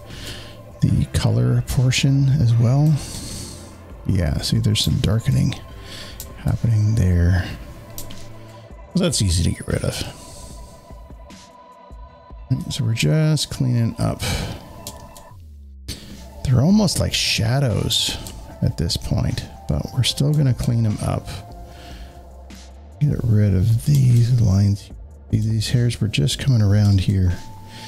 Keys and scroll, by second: 11.7 space, 11.8 space, 27.8 space.